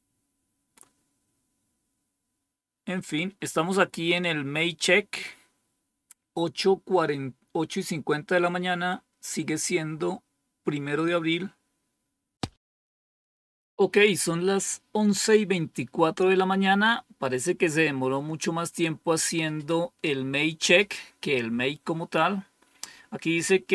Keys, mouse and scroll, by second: 0.6-1.2 scroll up 1, 1.2-4.1 scroll up 1, 4.1-4.6 drag.